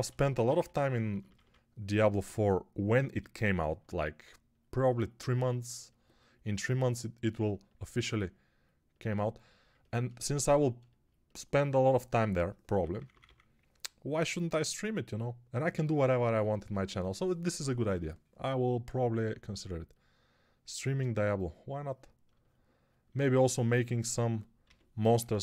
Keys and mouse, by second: 0.0-1.3 typing, 12.8 [, 13.0 [, 13.1 [, 15.6 x, 21.0 1, 24.5 g, 24.9 [, 25.1 [.